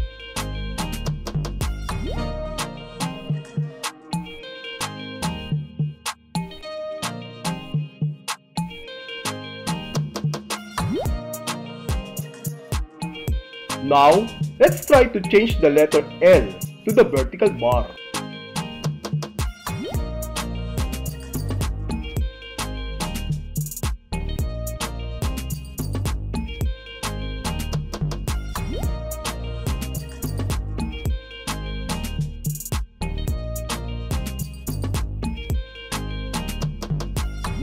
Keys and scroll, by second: 0.3 w, 1.5 w, 3.4 Right, 5.0 c, 6.7 Right, 8.2 w, 9.5 w, 10.5 w, 11.8 w, 18.0 Tab, 22.2 s, 24.2 s, 26.2 Return, 28.4 End, 36.2 BackSpace.